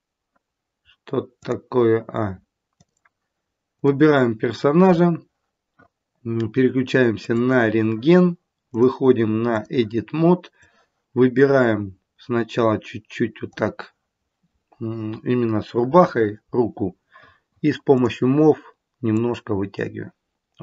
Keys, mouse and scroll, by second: 1.3 click, 3.6 click, 7.2 click, 8.6 click, 10.5 click, 17.9 click, 19.1 click.